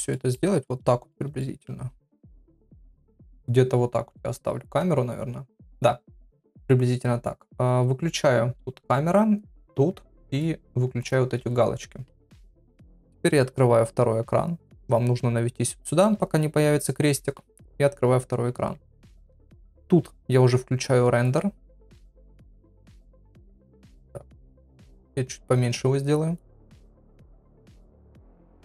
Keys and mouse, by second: 0.3 middle click, 1.4 middle click, 2.4 shift+middle click, 8.8 click, 10.3 click, 11.0 click, 13.4-14.7 drag, 22.6 m, 23.8 n, 25.8 click, 26.8 middle click, 27.3 shift+middle click.